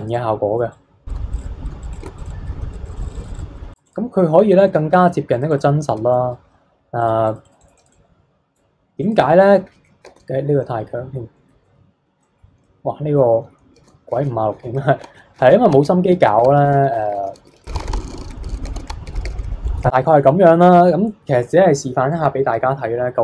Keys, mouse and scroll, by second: 1.1 f, 1.4 click, 1.7 f, 1.9 click, 2.2 click, 2.6 ctrl+z, 2.7 click, 3.4 scroll down 1, 3.5 middle click, 3.7 click, 4.3-4.6 scroll up 3, 4.6 middle click, 5.3 click, 6.1 shift+middle click, 6.9-9.2 drag, 9.2-9.7 scroll down 3, 9.7 ctrl+z, 10.0 ctrl+z, 10.6 middle click, 11.0 scroll down 1, 11.3-13.7 middle drag, 13.7 ctrl+z, 14.1 ctrl+z, 14.6 ctrl+z, 15.0 ctrl+z, 15.3 ctrl+z, 15.7 ctrl+z, 16.0 ctrl+z, 16.4 ctrl+z, 16.7 ctrl+z, 16.9 ctrl+z, 17.1 ctrl+z, 17.3-18.7 ctrl+z, 18.3 middle click, 18.4 ctrl+z, 18.9 ctrl+z, 19.1 ctrl+z, 19.1 ctrl+z, 19.2 ctrl+z, 19.4 middle click, 19.6 scroll down 3, 19.6 shift+middle click, 20.2-23.0 scroll up 3, 23.0 scroll up 1.